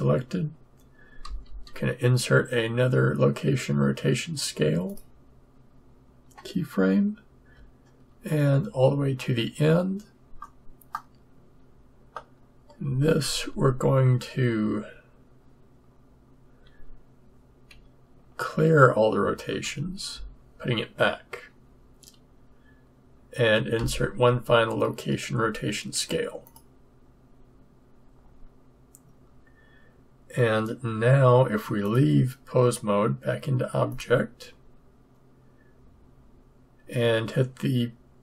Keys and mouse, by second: 1.2 i, 8.7 shift+Right, 10.9 click, 13.4 KP_3, 19.6 alt+r, 23.7 i, 31.8-33.5 drag.